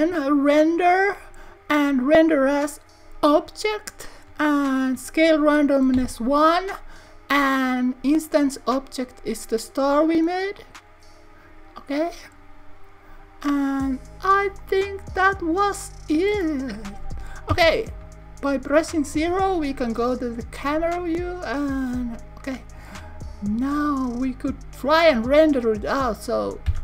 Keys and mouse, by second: 0.9 click, 2.0-3.5 drag, 5.2-7.4 drag, 8.5 click, 14.8 click, 16.4-17.7 middle drag, 17.6 KP_0.